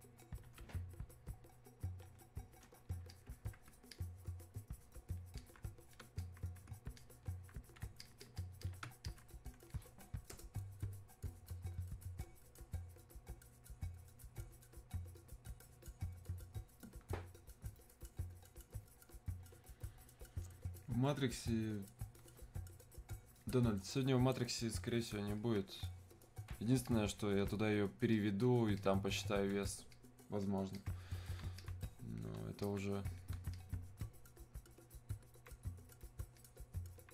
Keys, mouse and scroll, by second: 3.1-12.3 alt+drag, 25.4-37.1 alt+drag.